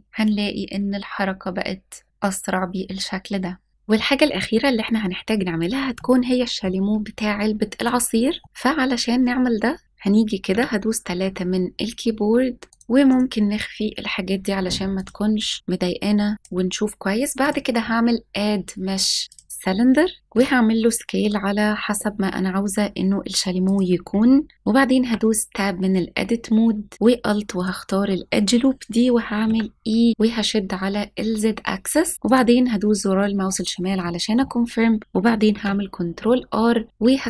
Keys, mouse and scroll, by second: 3.7 click, 7.1-7.8 middle drag, 8.1-8.5 scroll down 2, 8.4 middle click, 8.4 click, 9.8 middle click, 11.6 KP_3, 11.7 KP_3, 12.7 click, 14.9 click, 17.4-19.4 drag, 20.2 s, 23.6 click, 25.0 Tab, 26.9-27.5 scroll up 1, 27.5 alt+click, 29.4 e, 32.2 click, 33.3-33.8 scroll up 2, 34.0 shift+middle click, 35.4 ctrl+r.